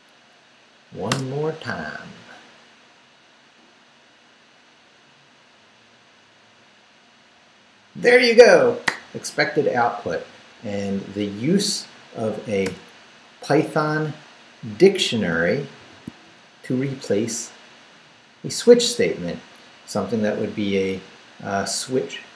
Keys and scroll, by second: 1.1 Return, 12.7 Return, 13.5 Up, 14.8 Down, 15.8 shift+v, 16.2 shift+Down.